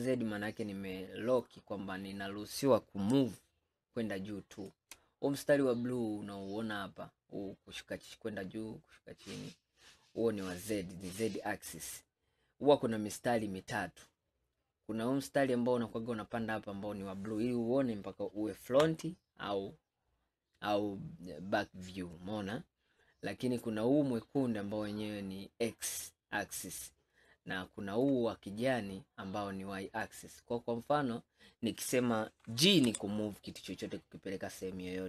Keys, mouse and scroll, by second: 12.2-13.3 middle drag, 13.3 scroll down 2, 13.8-16.9 middle drag, 18.9 KP_1, 27.3-32.9 middle drag, 32.9 g.